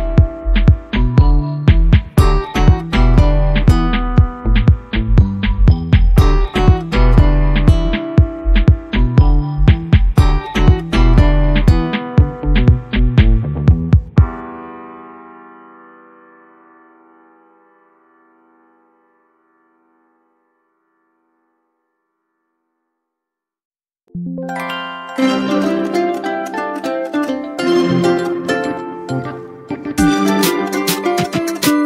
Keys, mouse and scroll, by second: 7.2 v, 7.8 click, 8.0 space, 8.2 right click, 8.4 click, 10.5 click, 14.1 ctrl+alt+space, 14.8 ctrl+click, 14.9 ctrl+space, 15.1-16.4 ctrl+space, 17.7 alt+click, 24.0 alt+space, 24.9 ctrl+click, 25.4 ctrl+space, 25.7 ctrl+click, 25.9-26.6 ctrl+space, 26.2 ctrl+space, 27.4 alt+click.